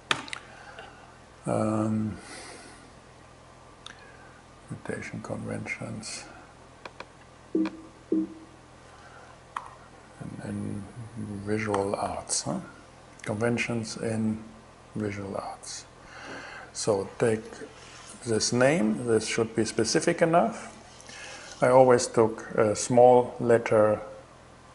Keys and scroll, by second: 9.1 shift+c, 11.3 shift+v, 11.6 shift+a, 14.6 Return.